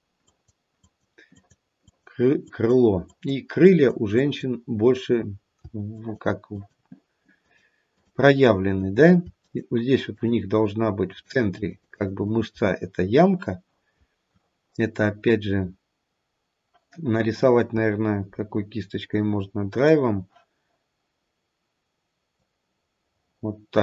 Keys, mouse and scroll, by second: 0.2 click, 0.7 click, 1.3 click, 1.8 click, 2.5 click, 3.1 click, 3.6 click, 4.2 click, 5.9 shift+click, 6.4 shift+click, 7.4 shift+click, 7.9 shift+click, 8.6 shift+click, 10.1 shift+click, 10.6 shift+click, 11.0 shift+click, 11.3 shift+click, 11.6 shift+click, 11.9 shift+click, 12.1 shift+click, 12.6-15.2 scroll up 2, 19.5-19.9 scroll up 5, 19.9 click, 22.3 click.